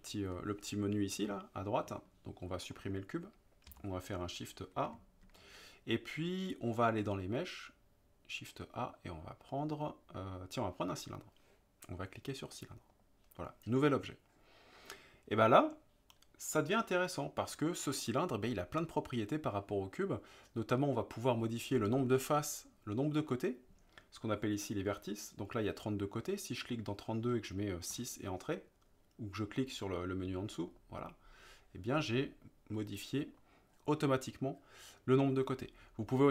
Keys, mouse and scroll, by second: 3.7 Delete, 5.2 shift+a, 26.8-30.7 drag, 32.7-33.4 middle drag.